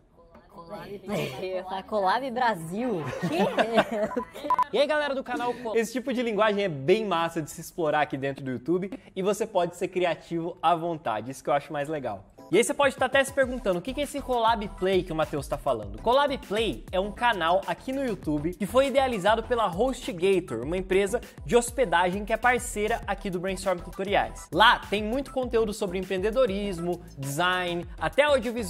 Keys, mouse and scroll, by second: 5.5 space.